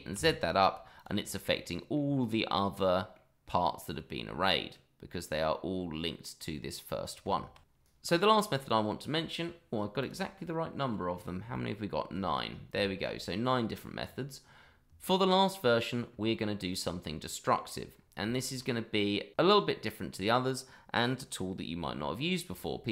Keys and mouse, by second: 0.1 z, 1.5-1.9 middle drag, 2.8-3.1 middle drag, 3.8-5.3 middle drag, 7.2 Tab, 7.9 shift+middle click, 8.1 middle drag, 10.0 click, 11.5-12.1 shift+middle drag, 12.8 shift+middle drag, 16.7-17.6 middle drag, 18.3 shift+middle drag.